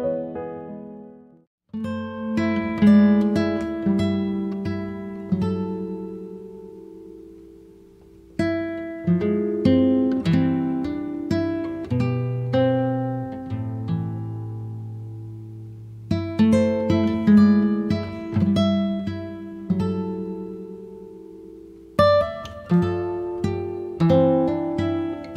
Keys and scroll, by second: 1.4 space, 7.7 b, 12.7 space.